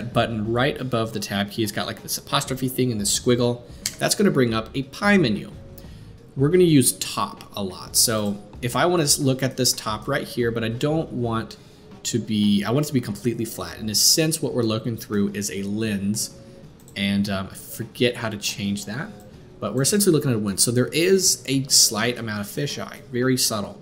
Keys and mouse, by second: 16.8-23.8 drag.